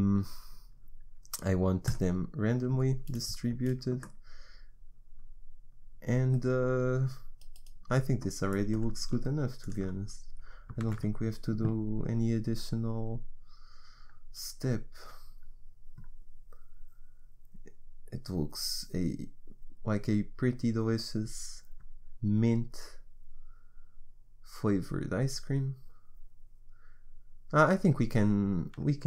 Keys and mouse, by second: 2.0-3.7 drag, 3.7-5.9 middle drag, 9.6-11.1 drag, 11.1 shift+z.